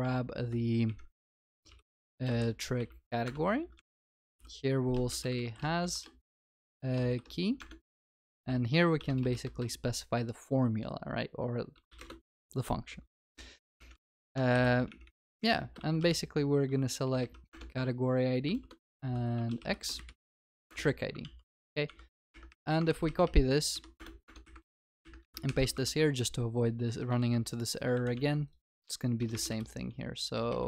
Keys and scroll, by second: 3.3 Return, 7.6 Return, 17.5 Return, 22.8 ctrl+s, 24.5 ctrl+c, 24.6 ctrl+v, 25.4 ctrl+y, 27.2 ctrl+c, 28.1 ctrl+v.